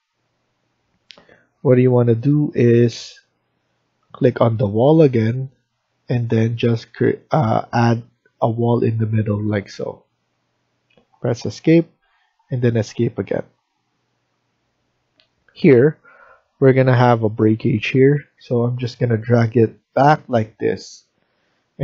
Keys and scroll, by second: 10.2 Escape, 10.6 Escape.